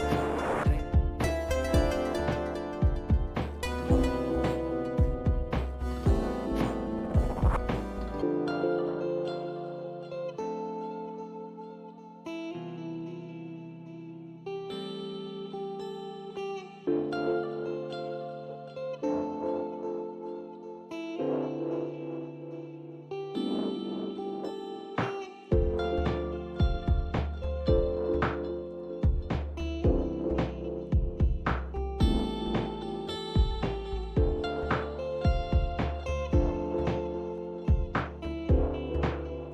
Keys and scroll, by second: 0.1 alt+Tab, 2.0 alt+Tab, 5.1 alt+Tab, 9.0 #, 10.1-17.0 typing, 18.4-19.2 typing, 20.5-22.9 typing, 24.7-26.5 typing, 28.2-29.4 typing, 31.4 typing, 33.6-39.5 typing.